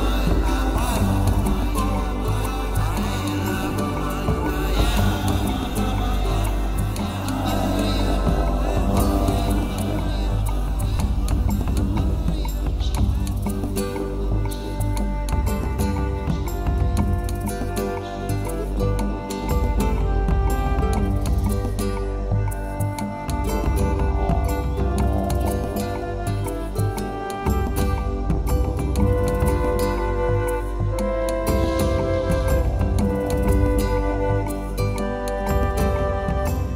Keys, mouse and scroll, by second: 0.7 ctrl+r, 5.4 middle click, 5.9 Tab, 6.0 middle click, 10.9 middle click, 13.4 click, 13.5 click, 13.9 middle click.